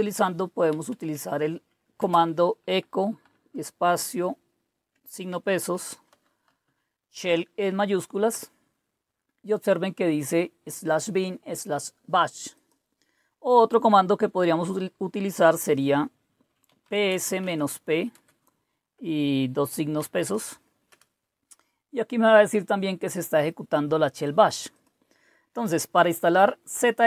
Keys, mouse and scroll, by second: 0.0-2.0 typing, 3.2 typing, 5.2 Caps_Lock, 5.4-8.2 typing, 12.5 click, 16.4-18.1 typing, 19.9 typing, 20.9 Return, 23.4 click, 24.7 click, 25.4 typing.